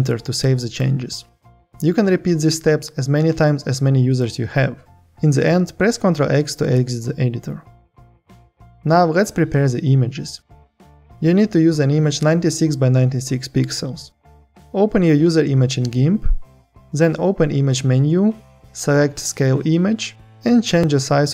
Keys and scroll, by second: 5.7 ctrl+x.